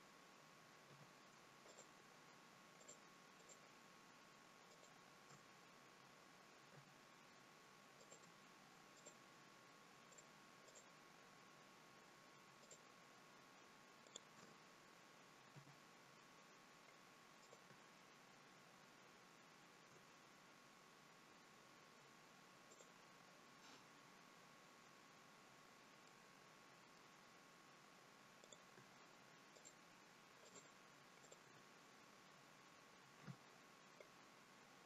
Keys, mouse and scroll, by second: 0.8 f, 1.5 click, 2.6 shift+click, 3.3 click, 4.6 shift+click, 6.6 f, 7.9 click, 8.8 shift+click, 10.0 click, 10.6 shift+click, 12.5 shift+click, 14.0 shift+click, 15.4 f, 17.3 click, 22.6 click, 25.9 middle click, 28.3 click, 29.5 shift+click, 30.4 shift+click, 31.1 shift+click, 33.1 f.